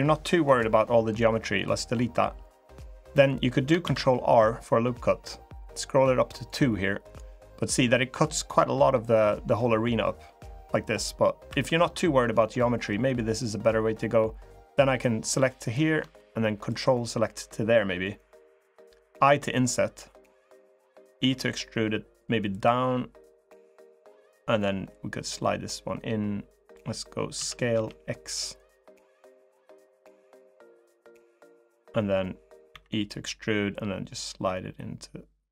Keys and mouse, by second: 0.2 Delete, 3.6 ctrl+r, 9.4-10.5 middle drag, 11.2 3, 12.3 click, 14.3 click, 16.4 ctrl+click, 20.9 e, 24.7-26.5 drag, 27.1 s, 30.1-31.5 drag, 33.5-35.5 drag.